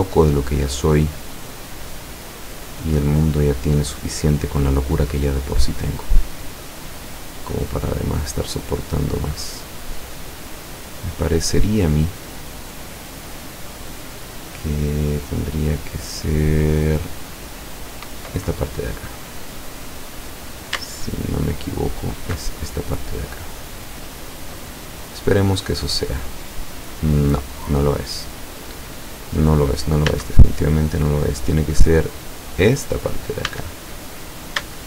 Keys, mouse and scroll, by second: 0.8-4.6 middle drag, 5.2-5.8 scroll up 2, 5.8-6.2 scroll down 1, 6.4-10.7 middle drag, 10.9-12.2 middle drag, 15.5-15.9 scroll down 1, 16.1-17.3 middle drag, 17.7-18.0 scroll up 1, 19.4 right click, 21.0 alt+shift+right click, 21.9 alt+shift+right click, 22.6 alt+shift+scroll down 1, 22.9 scroll up 1, 23.3 scroll down 1, 23.4-30.1 middle drag, 30.1 a, 32.6 right click, 33.5 a, 34.0 scroll up 1.